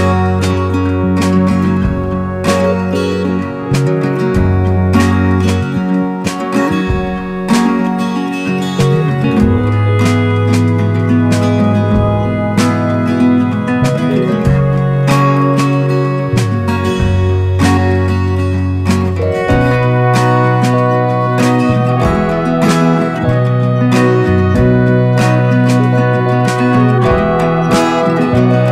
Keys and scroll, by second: 12.5 ctrl+c, 12.7 ctrl+v.